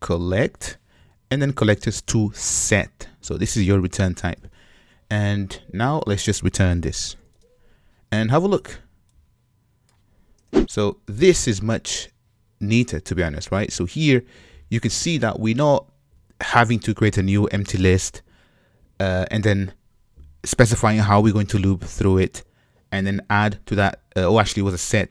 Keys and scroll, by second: 2.8 Return, 4.3 shift+super+Return.